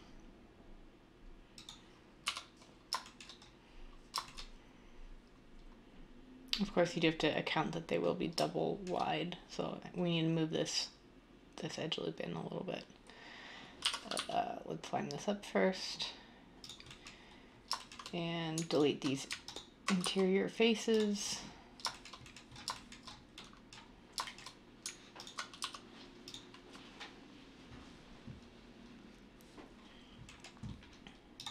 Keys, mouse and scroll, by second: 2.2 1, 13.8-14.1 typing, 20.0 x, 25.5 x.